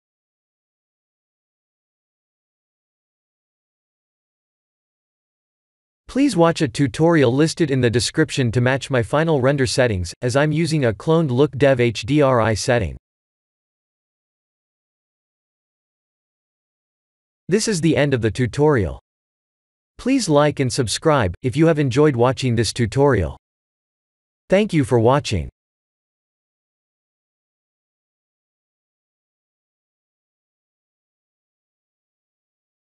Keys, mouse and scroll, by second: 0.7 click, 9.6 click, 10.9 click.